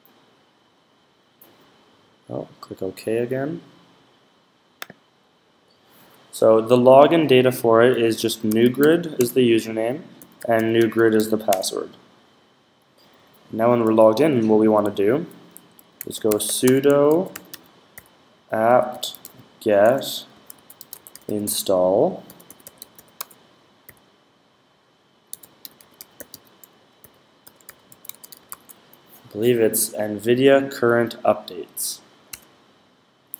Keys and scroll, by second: 7.5-11.5 typing, 15.7-23.7 typing, 24.9-28.9 typing.